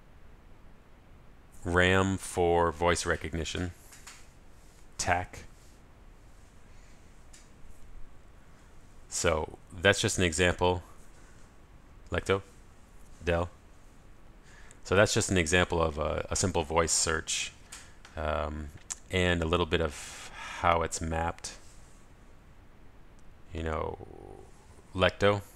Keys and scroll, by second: 12.8 ctrl+alt+shift+super+a, 24.7 super+Right.